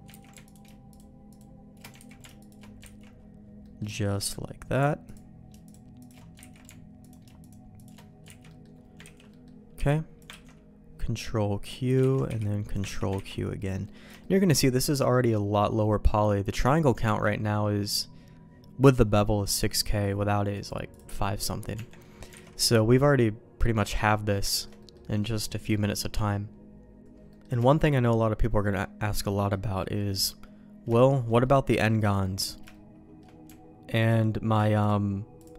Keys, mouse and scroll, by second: 0.2 ctrl+x, 0.4 alt+click, 1.9 ctrl+z, 2.3 alt+shift+click, 2.8 ctrl+x, 3.6 middle click, 3.9 shift+middle click, 6.3 ctrl+x, 7.7 alt+shift+click, 8.3 ctrl+x, 8.4 middle click, 9.0 ctrl+s, 9.2 middle click, 9.7 b, 10.4 ctrl+q, 11.6 click, 11.9 ctrl+x, 12.2 b, 12.9 ctrl+q, 13.1 ctrl+x, 13.8 middle click, 14.1 shift+middle click, 15.1 middle click, 17.0 Tab, 20.5 click, 20.9 click, 21.7 Tab, 22.0 middle click, 22.4 alt+a, 22.5 middle click, 23.1 middle click, 24.0 middle click, 24.4 shift+middle click, 24.7 middle click, 25.1 middle click, 27.2 middle click, 27.6 shift+middle click, 28.6 middle click, 29.2 middle click, 29.7 middle click, 30.9 shift+middle click, 31.4 middle click, 32.0 middle click, 32.6 shift+middle click.